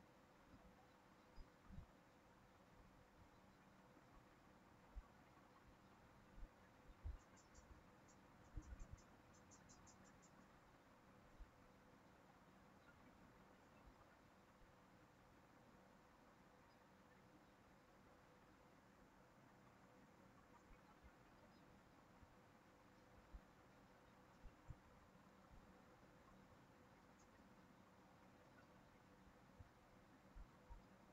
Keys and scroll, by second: 7.3 ctrl+c, 7.6 ctrl+v.